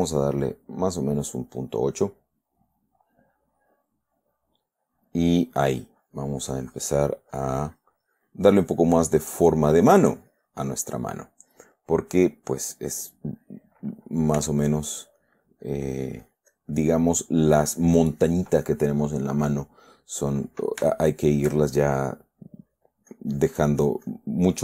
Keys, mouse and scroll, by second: 1.2 click, 4.1 middle click, 6.0-7.5 drag, 7.7-8.8 drag, 9.0-10.0 drag, 10.2 click, 14.8 f, 15.1 click, 15.6 click, 21.3 shift+middle click, 23.5-24.6 drag.